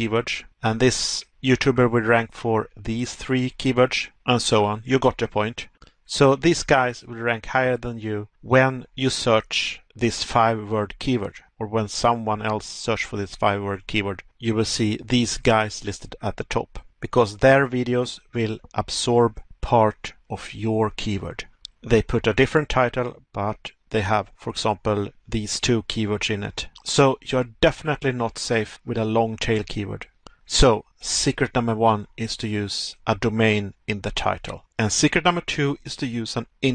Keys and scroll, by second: 1.6 Pause, 5.1 Pause, 7.1 Pause, 15.1 Pause, 17.6 Pause, 22.5 Pause, 27.8 Pause, 31.1 Pause, 35.0 Pause.